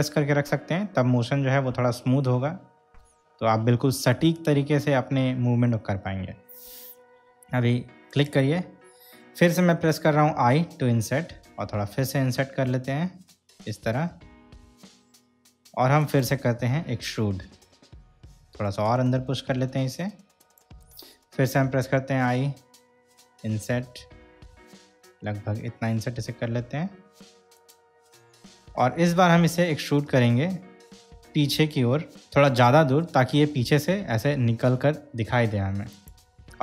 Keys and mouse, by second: 8.3 shift+click, 10.5 i, 16.2 click, 17.6 e, 20.6 shift+click, 21.9 i, 27.8 click, 30.3 e, 36.1 click.